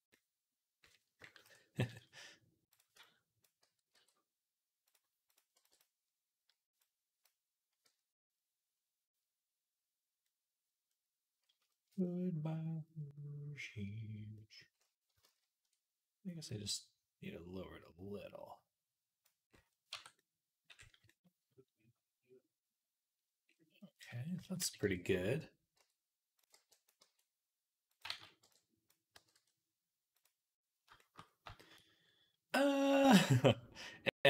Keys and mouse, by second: 1.3 KP_3, 1.8 z, 3.8 g, 5.4 b, 7.7 z, 8.1-10.1 middle drag, 10.2 click, 10.4 click, 10.7 click, 11.4 shift+middle click, 11.9 middle click, 14.2 middle click, 15.1 ctrl+z, 19.4 click, 19.8 Tab, 24.4 KP_3, 24.7 Tab, 25.6 z, 26.4 b, 26.8 g, 27.9 ctrl+z, 28.2 b, 29.0 g.